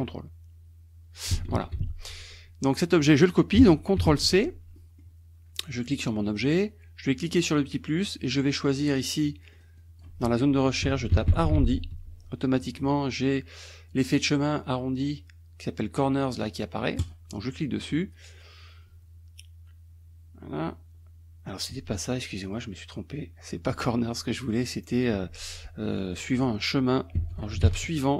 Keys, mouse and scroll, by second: 1.6 ctrl+z, 2.8 middle click, 4.0 ctrl+c, 4.8 middle click, 5.9 click, 7.3 click, 9.5 click, 10.7-12.0 typing, 17.1 click, 20.9-21.5 scroll up 1, 22.5 click, 23.8 click, 27.0-28.1 typing.